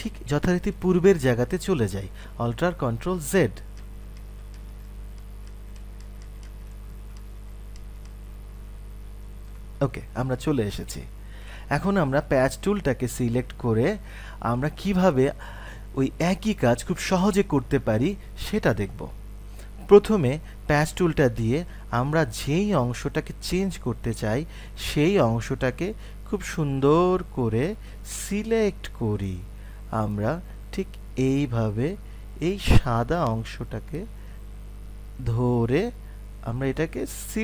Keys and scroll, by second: 3.3 ctrl+alt+z.